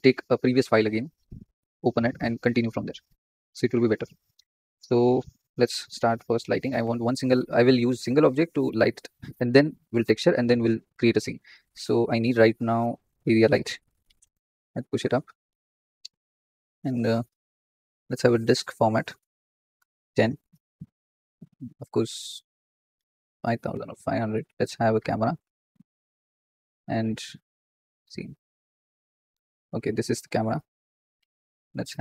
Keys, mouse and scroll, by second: 14.1 g, 18.3-22.9 drag, 22.9 KP_0, 25.3 KP_0, 26.1-26.5 scroll up 3, 28.0 click, 29.6 click, 30.8 click.